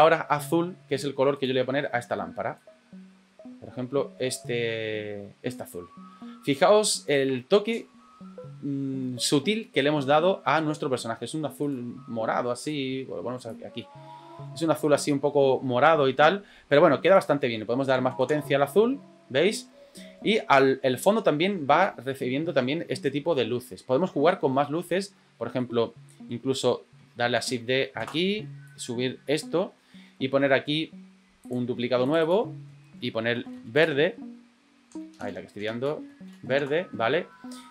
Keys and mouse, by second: 11.6 click, 17.0-19.6 drag, 25.6-26.3 middle drag, 27.4 shift+d, 28.7 click, 32.0 click, 32.3-37.1 drag, 35.1 BackSpace, 35.2 BackSpace.